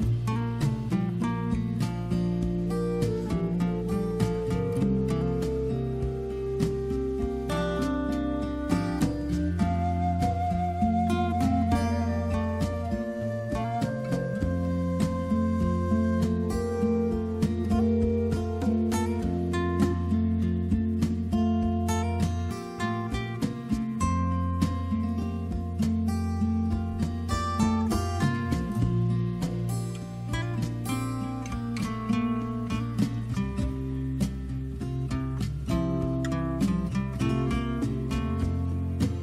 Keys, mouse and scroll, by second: 3.6 click, 7.9 click, 10.1 click, 11.6 click, 11.7 click, 12.2 click, 12.5 click, 13.8 click, 14.1 click, 17.9 click, 20.7 click, 22.3 click, 25.5 click, 27.3 click, 32.9 click, 36.0 click, 37.8 click, 37.9 click, 38.1 click, 38.9 click.